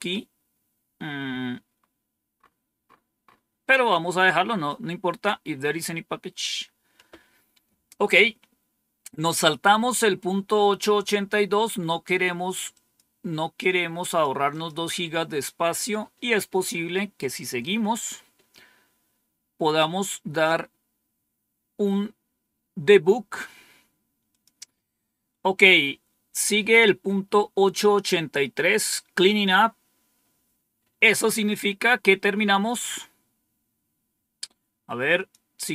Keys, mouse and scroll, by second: 1.7-2.3 scroll down 2, 2.3 scroll down 1, 4.1-5.0 scroll down 3, 10.0 scroll up 2, 12.6 click, 13.5 click, 14.4 click, 24.2 click, 32.3 scroll down 2, 32.9-33.6 scroll down 2, 35.1 click.